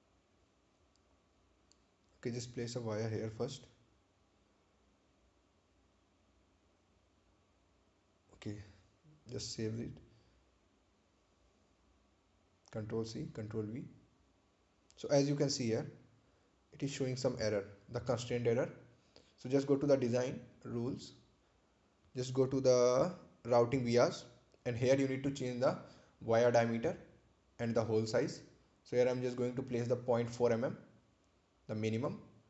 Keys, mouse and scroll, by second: 2.4 click, 5.9 click, 7.8 right click, 9.6 click, 12.4 click, 14.2 click, 15.9-16.2 scroll up 1, 20.9 click, 24.4 click, 28.5 click, 29.8-30.9 typing, 31.4 Return.